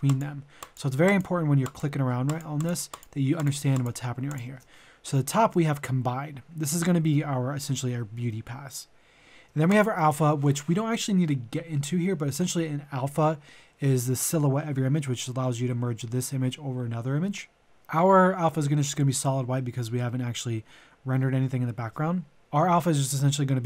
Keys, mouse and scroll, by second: 9.6 ctrl+shift+click.